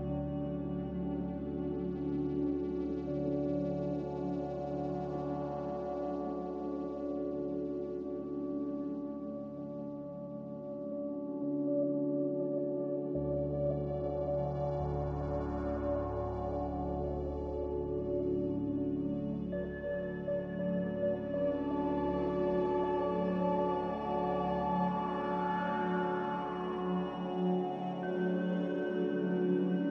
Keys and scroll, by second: 9.1 ctrl+z, 29.0-29.8 typing.